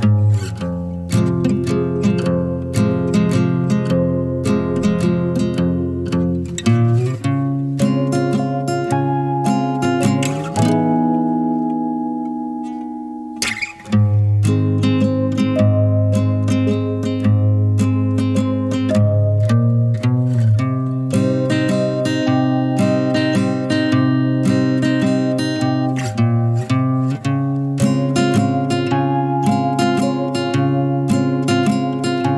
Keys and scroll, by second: 7.7-8.1 typing, 9.7 typing, 11.6 typing, 15.5-15.9 typing, 17.4 typing, 31.2-31.5 typing.